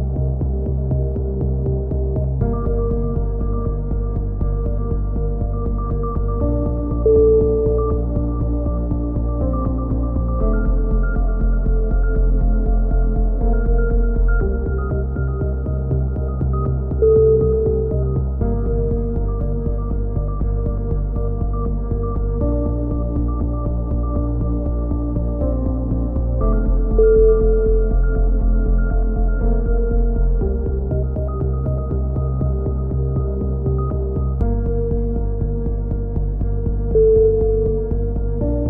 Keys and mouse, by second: 1.2 click, 1.3-2.3 middle drag, 1.6 c, 2.3-3.3 right drag, 2.7 c, 3.5 right click, 4.2 middle click, 4.5-5.9 drag, 6.6 a, 6.7 middle click, 7.2-8.7 drag, 14.3 z, 14.7 click, 15.1 click, 15.7-16.8 middle drag, 16.7 KP_3, 17.1 z, 19.2 click, 20.0 middle click, 22.7-24.1 middle drag, 23.4 z, 24.1 right click, 24.2 z, 26.6 KP_3, 27.2-28.2 drag, 29.2 click, 29.5 c, 31.2 click, 31.5-33.5 right drag, 31.5 c, 32.7 s, 33.8-36.1 drag, 35.9 a, 36.4 c, 37.2 right click, 38.2 click, 38.4 ctrl+z.